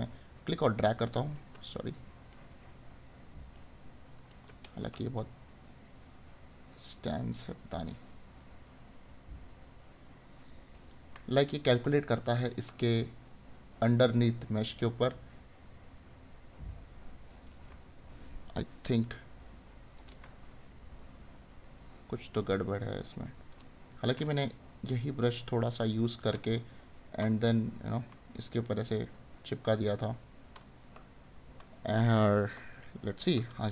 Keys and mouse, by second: 4.7 right click, 9.4 right click, 11.2 right click, 21.6 right click, 24.4 right click, 26.2 right click, 28.5 right click, 30.8 right click.